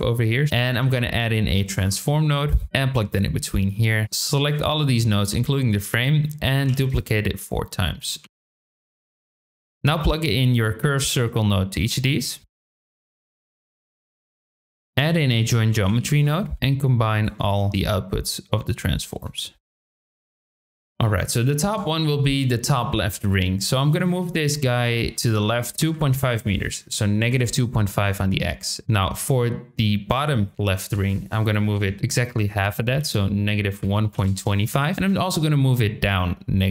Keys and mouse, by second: 0.4 shift+middle click, 0.6 shift+a, 3.2 click, 4.0-4.4 drag, 6.0 shift+middle click, 6.6 shift+d, 8.2 shift+d, 8.6 shift+click, 8.7 shift+d, 9.2 shift+click, 9.3 shift+d, 10.5 shift+click, 12.4 click, 12.6 shift+click, 13.0 click, 13.3 shift+click, 13.6 click, 13.9 shift+click, 14.1 click, 14.6 shift+click, 14.7 shift+a, 16.5 click, 16.5 v, 16.5 g, 17.5 shift+middle click, 18.3 click, 19.5 shift+middle click, 19.7 click, 20.1 shift+middle click, 20.4 click, 20.7 shift+middle click, 21.0 shift+middle click, 23.1 click, 23.6-27.9 drag, 31.0-34.7 drag, 34.9-36.7 drag.